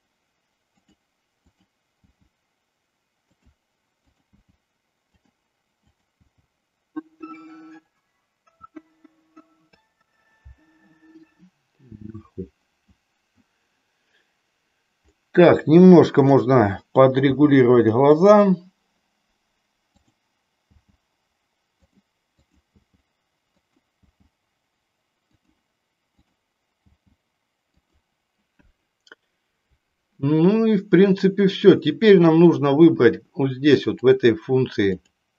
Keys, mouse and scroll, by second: 0.8 click, 1.5 click, 3.3 click, 4.0 click, 4.5 g, 5.3 click, 5.9 click, 6.3 g, 7.8 click, 8.7 g, 9.5 click, 16.3 click, 17.3 g, 20.1 click, 20.8 g, 21.9 click, 22.5 click, 22.8 g, 23.7 click, 26.1 click, 26.9 g, 27.9 click, 34.0 click, 35.0-35.3 drag.